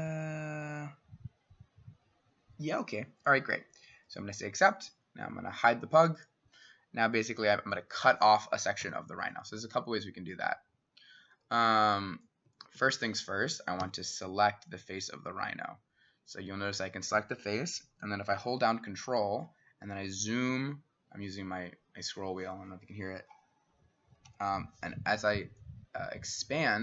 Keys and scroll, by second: 8.8 s, 12.5 Escape, 12.8 Escape, 13.8 s.